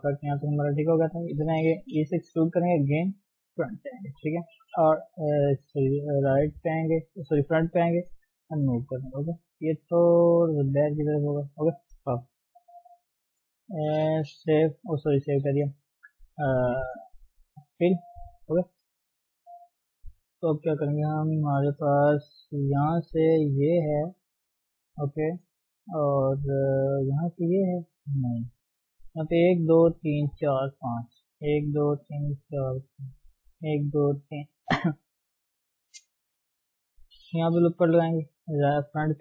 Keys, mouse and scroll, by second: 0.1 shift+middle click, 0.3 scroll up 1, 0.5 shift+middle click, 1.2 click, 1.5 shift+middle click, 1.8-2.1 scroll down 2, 2.1 e, 3.5 KP_1, 4.5 g, 6.9-9.1 scroll up 1, 9.1 click, 10.5 g, 11.2 click, 12.0 KP_3, 12.7 click, 13.3 shift+click, 13.7 shift+click, 14.5 f, 14.8 scroll down 2, 15.1 shift+middle click, 15.3 scroll up 2, 15.6 shift+middle click, 15.9 scroll down 1, 17.0 scroll up 1, 17.2-17.6 scroll down 1, 17.6 shift+middle click, 17.9-18.7 scroll up 3, 18.7 shift+middle click, 19.0-19.5 scroll down 2, 19.5-21.1 shift+middle drag, 21.1 KP_2, 21.5-22.0 scroll up 3, 22.0 shift+middle click, 22.9 click, 24.0-24.4 scroll down 1, 24.4-28.7 middle drag, 29.7 click, 30.0 click, 30.4 click, 30.9 click, 31.5 click, 31.8 click, 32.1 click, 32.7 click, 33.0 click, 33.5 click, 33.9 click, 34.5 click, 37.7 ctrl+r, 38.5 KP_1, 39.0-39.2 scroll up 2.